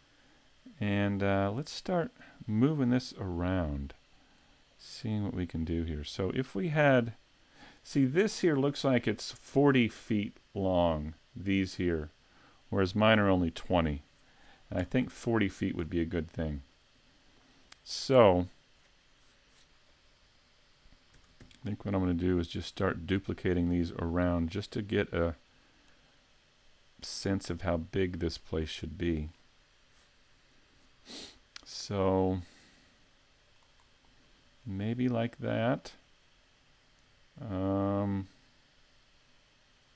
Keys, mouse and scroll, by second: 1.6 click, 2.8 click, 4.4 click, 6.5 click, 8.6-9.7 scroll up 4, 9.0 middle click, 10.1 middle click, 15.8-16.6 scroll down 1, 16.6-17.8 scroll down 2, 21.2 shift+d, 23.8 click, 24.6 right click, 25.4 click, 28.6 scroll down 2, 29.1 middle click, 31.8 scroll up 1, 32.2 middle click, 33.8-34.3 scroll up 2, 34.3 shift+middle click, 35.3 middle click.